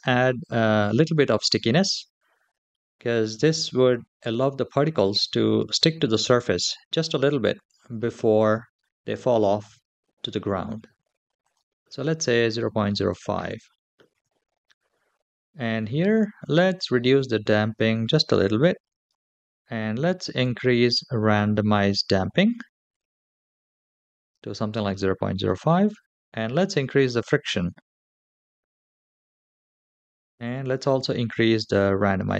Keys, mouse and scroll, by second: 11.1-13.1 drag, 16.4-18.9 drag, 19.9-24.1 drag, 26.2-29.5 drag, 30.1-32.3 drag.